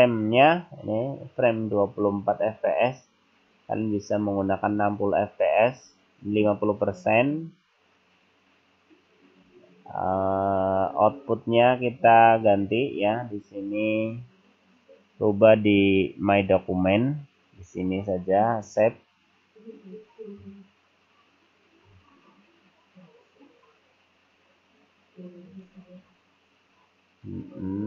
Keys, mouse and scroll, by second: 5.9-6.3 scroll up 3, 8.7 scroll down 1, 9.9-10.8 scroll down 6, 12.8 click.